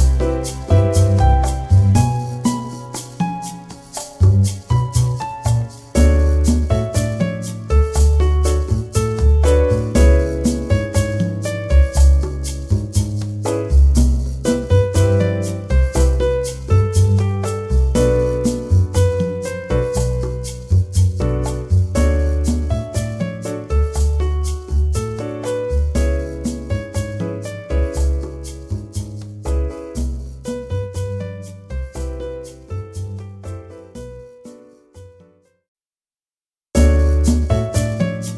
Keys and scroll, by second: 15.2 shift+i, 16.6-20.6 typing, 21.7-24.2 typing, 25.4 shift+u, 27.7-30.6 typing, 32.3-35.3 typing.